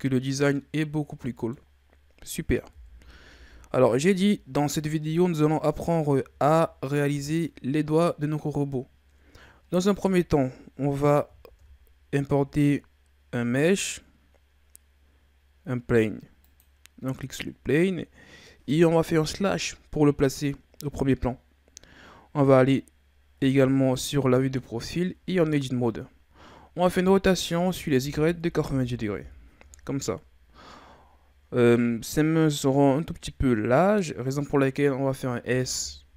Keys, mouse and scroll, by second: 2.7 KP_1, 3.8-5.3 scroll down 8, 6.0-6.9 shift+scroll up 3, 6.9-10.0 scroll down 2, 11.4 shift+a, 19.3 KP_Divide, 23.4 KP_3, 25.2 Tab, 27.0 r, 35.4 s.